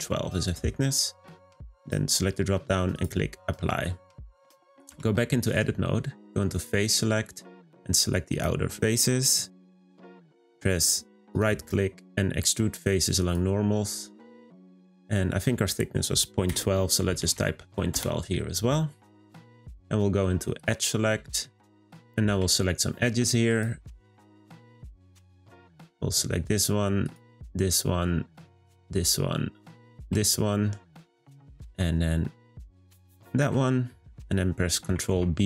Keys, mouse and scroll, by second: 0.4-1.8 middle drag, 1.8-4.3 drag, 4.3 middle click, 4.9 Tab, 5.3-6.6 shift+middle drag, 6.6 click, 7.0-8.3 middle drag, 8.3 alt+click, 11.3-14.4 right drag, 19.4-20.6 middle drag, 20.6 click, 21.2-22.6 middle drag, 22.6 click, 23.4 shift+click, 25.5 alt+shift+click, 27.0 alt+shift+click, 28.3 alt+shift+click, 29.6 alt+shift+click, 31.1-32.8 middle drag, 32.8 alt+shift+click, 33.9-34.4 middle drag, 34.4 scroll up 2, 35.1 b.